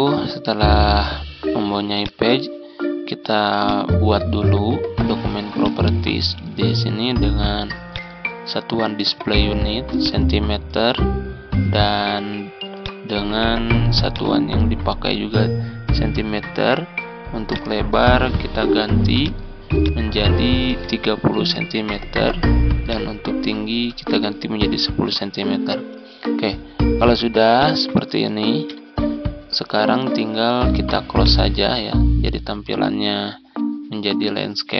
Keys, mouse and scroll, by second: 1.8-20.6 drag, 20.6 click, 21.2 click, 22.7 click, 24.0-24.5 typing, 27.5 click, 28.6 BackSpace, 29.9-31.0 scroll down 1, 31.0 click, 33.2 ctrl+scroll up 1, 33.8 ctrl+scroll up 1, 34.5 ctrl+scroll down 1.